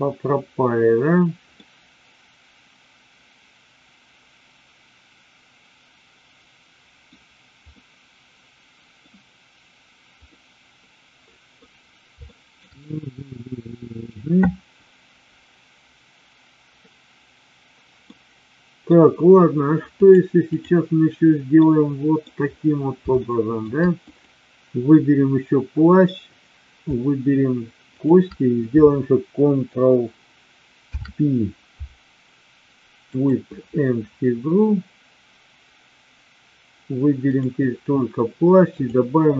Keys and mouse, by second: 1.6-7.0 middle drag, 7.7-9.0 middle drag, 10.4-11.5 middle drag, 12.2 shift+middle click, 12.7-14.1 middle drag, 18.1 middle click, 19.9-20.7 drag, 21.6-22.1 middle drag, 23.1-23.5 shift+middle drag, 24.0 click, 27.9 shift+click, 30.7 ctrl+p, 38.7-39.3 drag.